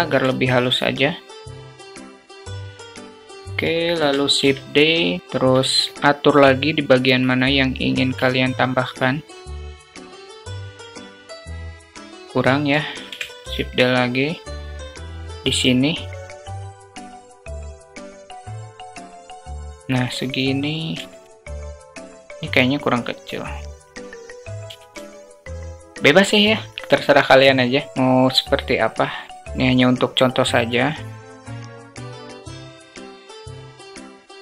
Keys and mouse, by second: 0.1 alt+shift+drag, 1.4 g, 1.7 alt+drag, 2.1 s, 2.5 click, 3.2 alt+middle click, 3.9 shift+d, 5.4 alt+click, 6.1-7.1 drag, 7.1 s, 8.2-9.3 alt+middle drag, 9.5 click, 9.9 alt+middle click, 10.3 KP_0, 10.7 click, 12.2 click, 13.1 shift+d, 16.2 g, 19.0 s, 20.8 g, 22.4 s, 23.9 g, 24.8 g, 25.6 click, 27.7 click, 28.8 click, 32.2 click, 32.5 click, 32.7 alt+shift+click, 33.6 click.